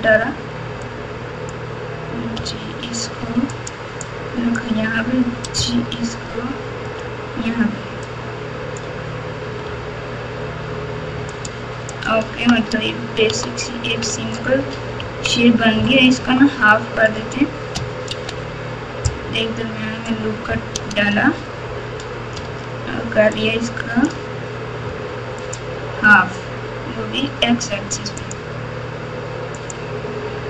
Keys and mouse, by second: 0.9 click, 2.3 g, 4.0 click, 5.5 g, 6.9 g, 8.1 click, 9.6 g, 12.0 click, 13.2 Tab, 14.1 alt+z, 15.0 KP_1, 16.2 Tab, 18.0 ctrl+r, 22.4 alt+z, 23.5-24.0 drag, 24.8 x, 29.7-30.4 drag.